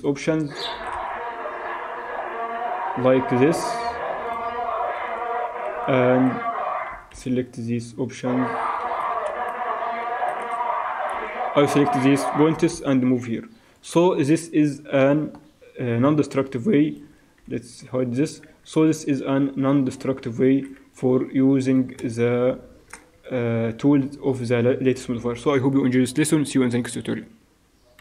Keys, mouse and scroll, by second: 0.7 g, 5.0 alt+a, 5.7 b, 6.9 g, 9.3 alt+a, 10.1 Escape, 10.4 a, 11.2 b, 12.5 g, 14.1 Tab, 17.4 h, 18.5 z, 20.2-23.5 ctrl+drag.